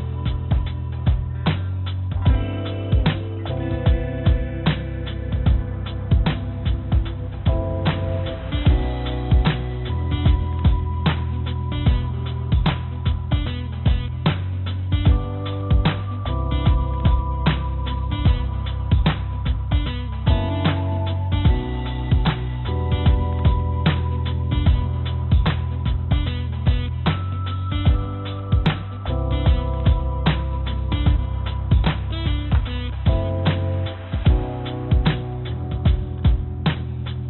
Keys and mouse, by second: 0.0 click, 0.3 click, 0.5 click, 1.5 h, 1.7 h, 2.0 h, 5.5 ctrl+z, 5.7 ctrl+z, 5.8 ctrl+z, 6.0 ctrl+z, 6.2 ctrl+z, 6.4 ctrl+z, 6.5 ctrl+z, 6.7 ctrl+z, 6.8 ctrl+z, 7.7 click, 8.3 click, 12.7-13.2 drag, 17.1 click, 17.2 click, 21.2 h, 24.6-28.9 drag, 32.4 ctrl+j, 34.1 click, 35.8-36.2 drag, 37.0 ctrl+j.